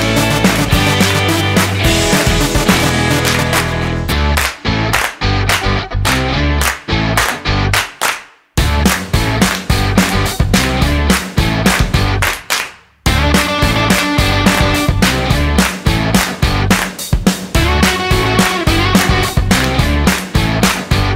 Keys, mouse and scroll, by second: 13.9 click.